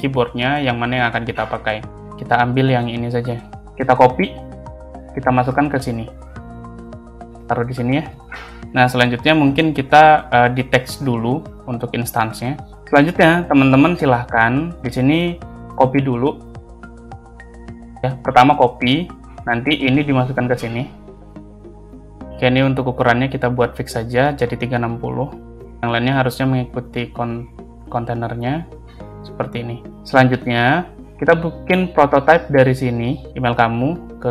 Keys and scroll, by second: 3.5 ctrl+c, 5.7 ctrl+c, 6.3 ctrl+v, 8.1 space, 12.7 space, 14.0 space, 16.9 ctrl+c, 22.3 space, 25.5 Return, 29.9 space.